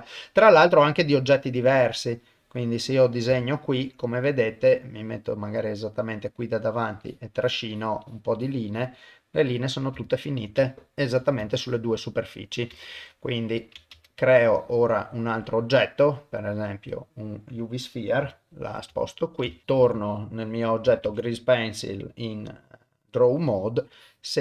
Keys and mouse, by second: 0.7-2.5 drag, 2.6 middle click, 3.4 ctrl+middle click, 3.9 middle click, 4.7-6.2 middle drag, 6.7 click, 7.0 click, 7.4 click, 7.7 click, 8.0 click, 8.4 click, 8.7 click, 9.1 middle click, 10.1 ctrl+middle click, 10.7 shift+middle click, 11.5 ctrl+middle click, 12.1 middle click, 12.9 ctrl+Tab, 13.9 shift+a, 19.1 ctrl+middle click, 19.5 shift+middle click, 20.4 click, 21.1 ctrl+Tab, 24.0 click.